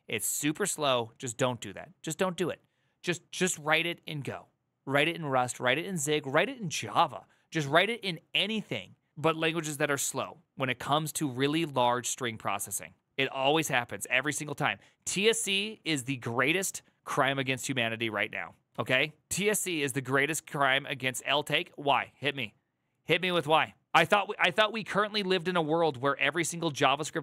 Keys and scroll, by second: 18.7 alt+[.